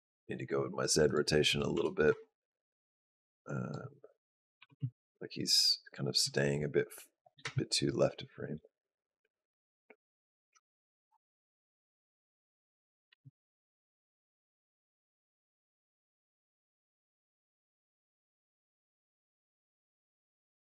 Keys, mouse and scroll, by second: 0.9 click, 1.3 g, 2.5 click, 4.4 g, 7.3 space, 12.9 space, 13.5 click.